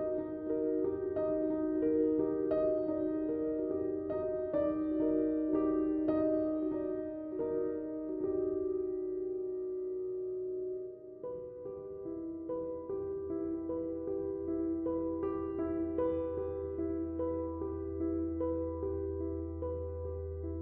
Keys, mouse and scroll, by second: 6.2 space, 6.3 click, 7.0-9.9 drag, 12.3-17.4 drag, 17.9 space, 18.0 click, 18.4 space, 18.9 ctrl+click.